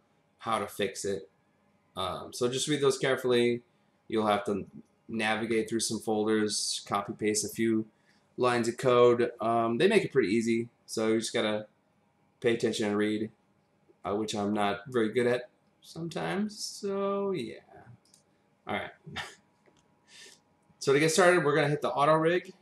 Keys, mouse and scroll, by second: 18.0 click.